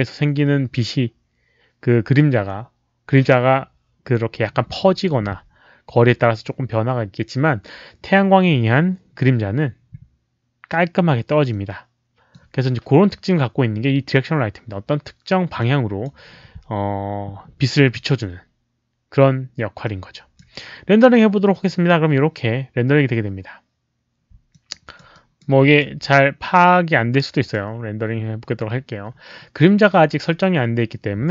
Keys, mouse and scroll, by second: 11.4 click, 15.5-16.0 drag, 19.8-20.3 drag, 21.5 click, 22.9 click, 24.5 alt+click, 25.3 alt+right click, 25.6 alt+click, 27.4 click.